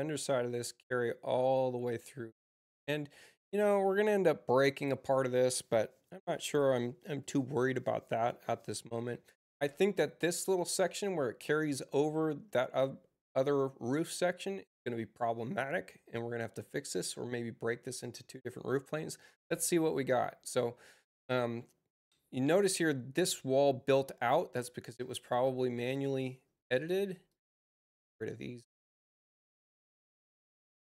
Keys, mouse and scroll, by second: 17.9 click, 26.6 space, 27.2 click, 27.8 ctrl+click, 29.1 ctrl+click.